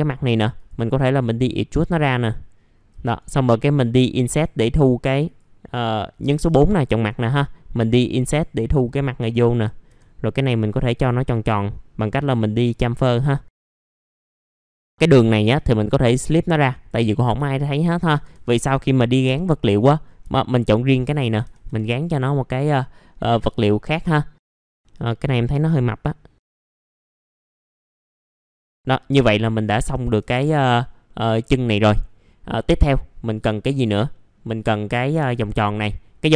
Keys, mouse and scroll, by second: 0.5 click, 2.0 alt+middle click, 3.0 right click, 5.2 click, 5.7 middle click, 6.7 click, 7.0 right click, 8.0 click, 9.4 right click, 9.6-10.7 scroll up 2, 10.7 click, 11.3 right click, 12.7-15.5 drag, 15.8 right click, 16.7 click, 17.1 scroll down 1, 17.4 alt+middle click, 18.9 middle click, 19.6 click, 20.0 scroll down 1, 20.3 alt+middle click, 21.7-23.1 scroll down 1, 23.1-24.7 scroll up 1, 24.7 scroll up 1, 24.9 click, 26.6 1, 26.7 scroll down 1, 27.5 scroll down 1, 27.7 middle click, 27.8 click, 28.0 middle click, 28.3 click, 28.5 alt+middle click, 30.6 scroll down 1, 31.0 middle click, 31.5-32.0 scroll down 1, 32.0 middle click, 34.5-36.3 scroll up 1.